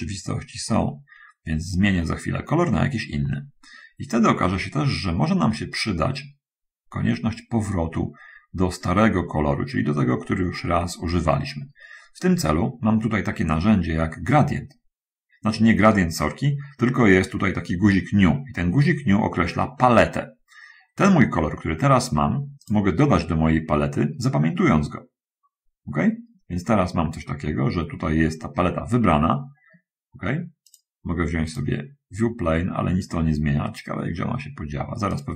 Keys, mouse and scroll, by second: 4.1-12.7 drag, 22.9 click, 25.8 middle click, 26.6-27.1 scroll up 2, 27.7 middle click, 31.8 click.